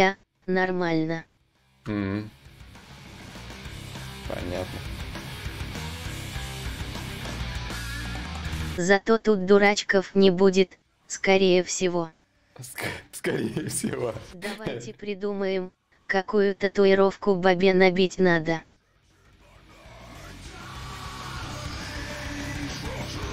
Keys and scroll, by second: 3.6 ctrl+z.